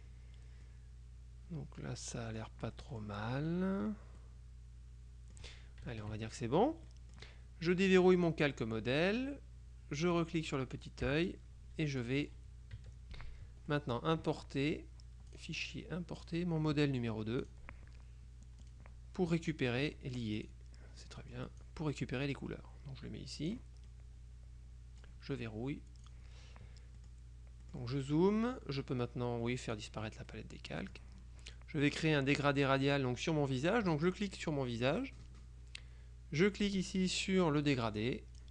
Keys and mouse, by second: 0.8-3.6 drag, 4.3-5.9 drag, 6.0 KP_Subtract, 7.0 middle click, 8.0 click, 10.3 click, 11.2 KP_Subtract, 12.1 click, 12.9 KP_Subtract, 13.8 middle click, 15.5 click, 16.3 click, 17.5 click, 18.7 click, 19.5 middle click, 20.5 click, 21.1 middle click, 24.0 click, 26.1 click, 27.1 click, 28.1 click, 29.7 click, 30.4-31.5 middle drag, 34.2 click, 38.1 click.